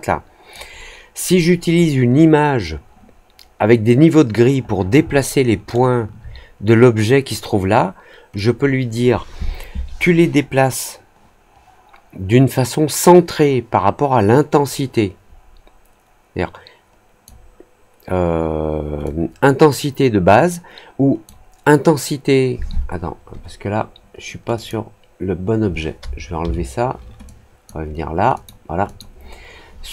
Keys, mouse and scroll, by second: 5.1 alt+middle click, 8.3-17.2 drag, 19.0-21.2 drag, 24.5 click, 27.2 click, 28.3 click, 28.8 click.